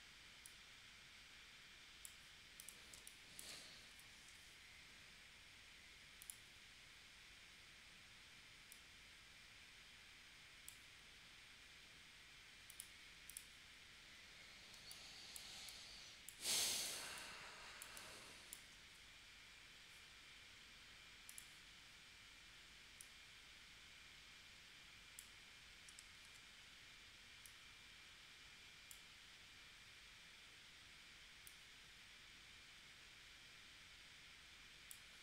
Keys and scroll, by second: 3.0 space, 3.9 p, 14.7 space, 26.2 super+z.